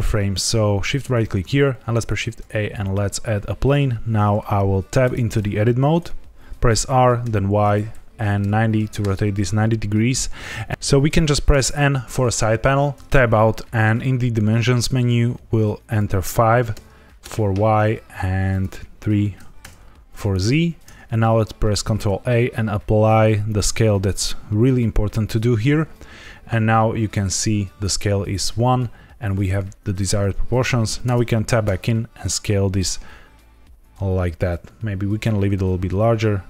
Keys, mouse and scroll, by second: 1.1 shift+right click, 1.7 shift+a, 5.0 Tab, 6.6 r, 7.2 y, 8.3 KP_9, 8.4 KP_0, 8.9 KP_Enter, 11.4 n, 12.9 Tab, 15.8 click, 18.4 click, 21.7 ctrl+a, 31.0 Tab, 31.6 s.